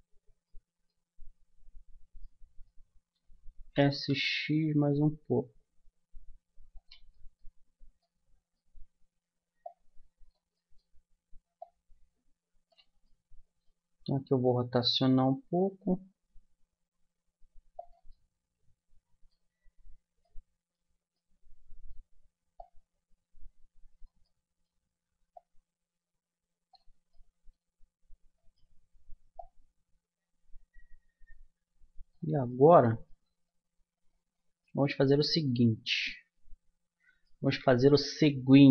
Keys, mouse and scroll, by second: 3.6 s, 7.1-10.2 middle drag, 11.2-12.6 middle drag, 13.0-14.4 middle drag, 14.4-17.6 drag, 14.4 r, 18.1-21.7 middle drag, 22.6-23.6 middle drag, 24.2-25.3 middle drag, 25.3 click, 25.4-26.7 middle drag, 27.1-30.9 middle drag, 30.9 click, 32.5-36.9 middle drag, 38.6 middle click.